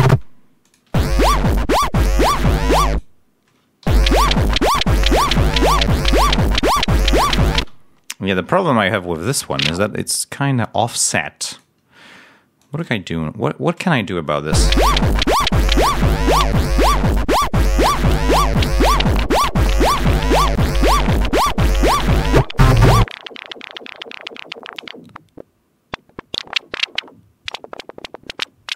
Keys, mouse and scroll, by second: 0.0 space, 0.5 click, 0.8 space, 1.2 scroll down 1, 2.8 click, 3.7 l, 6.2 scroll down 2, 7.5 ctrl+space, 8.0 ctrl+scroll up 2, 9.4 ctrl+a, 11.4 click, 12.5 click, 14.4 l, 15.6-18.0 drag, 18.6-20.4 drag, 22.1 click, 22.9 click, 24.7-27.0 drag.